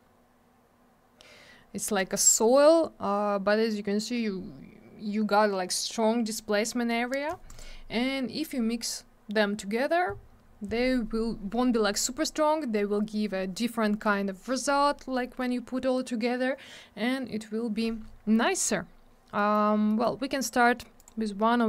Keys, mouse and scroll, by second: 7.5 click, 7.6 click, 18.6 click, 18.6 click, 19.3 middle click, 19.5 middle click, 19.7-20.0 scroll down 2, 19.9 middle click, 20.0 double middle click, 20.1 scroll up 1, 21.0 click, 21.0 click.